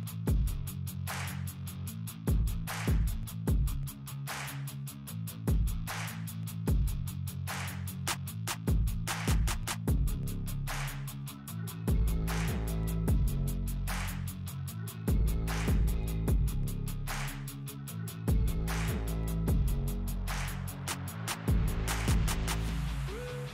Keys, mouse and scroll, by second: 1.9 click, 9.6 ctrl+x, 10.3 scroll down 1, 11.0-12.4 drag, 12.4 Delete, 14.5 Delete, 14.9 ctrl+v, 15.2 ctrl+g, 16.1 p, 16.5 F4, 17.1 scroll down 1, 19.2 scroll up 1, 19.4-23.5 drag.